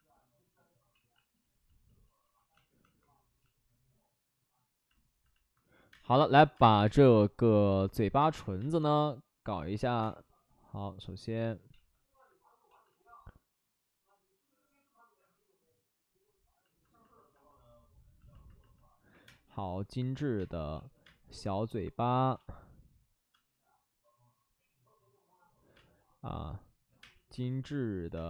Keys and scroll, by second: 0.9 ctrl+z, 1.1 ctrl+z, 1.2 ctrl+z, 1.4 ctrl+z, 2.6 ctrl+z, 5.9-7.4 typing, 9.8 ctrl+z, 10.0 space, 11.7 ctrl+z, 12.7 ctrl+z, 12.8 ctrl+z, 19.1 1, 19.2 space, 20.3 space, 21.0 ctrl+z, 21.0 space, 22.1 ctrl+z, 22.3 space, 23.3 space, 25.7 space, 26.8 5, 26.9 space, 28.1 space.